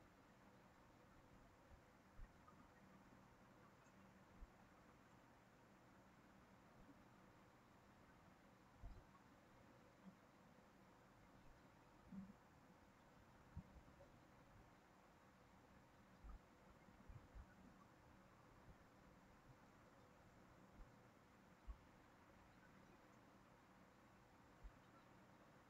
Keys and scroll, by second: 12.1 ctrl+c, 12.5 ctrl+v.